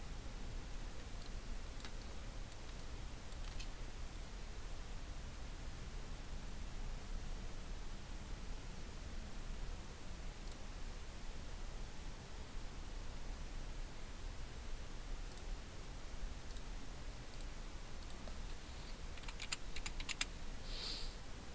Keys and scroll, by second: 1.4 ctrl+space, 2.7 ctrl+space, 19.4-20.1 typing.